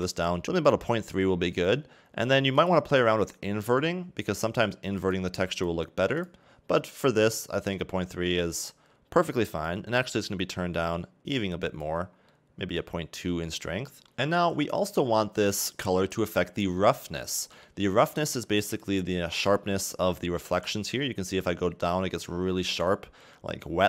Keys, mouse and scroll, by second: 2.6 click, 5.6 click, 6.2 click, 7.0 scroll down 2, 7.3 middle click, 8.0-8.4 scroll up 2, 10.0 click, 12.2 scroll down 2, 12.3 middle click, 12.9-13.3 scroll up 3, 13.3 middle click, 13.8 scroll down 2, 14.1 click, 15.6 click, 21.4 click.